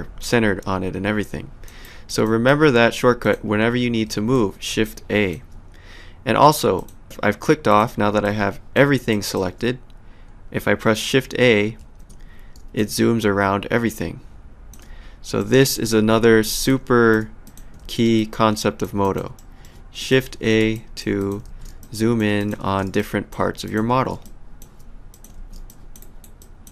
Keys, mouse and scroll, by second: 1.8 alt+right click, 2.3 alt+click, 4.1 shift+a, 4.8 alt+click, 6.8 click, 7.7 click, 8.2 alt+click, 11.8 shift+a, 12.8 alt+click, 15.4 middle click, 16.3 shift+a, 16.7 alt+click, 17.8 shift+a, 18.2 alt+click, 19.4 alt+middle click, 20.0 click, 20.3 shift+a, 20.8 alt+click, 21.5 shift+a, 21.8 alt+click, 22.6 shift+a, 23.0 alt+click, 23.9 shift+a, 24.3 alt+click, 25.4 shift+a, 25.7 alt+click, 26.0 alt+right click, 26.4 alt+click.